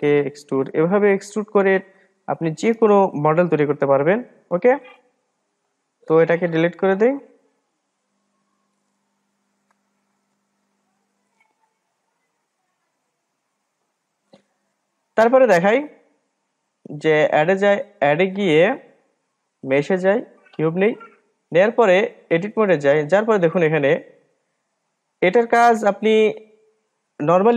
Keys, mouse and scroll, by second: 0.1 e, 1.1-4.2 middle drag, 7.2-8.6 drag, 9.2 Delete, 16.4-20.8 drag, 22.6-23.8 drag, 23.8-24.3 scroll down 1, 24.3-26.4 scroll up 3, 26.4-27.5 drag.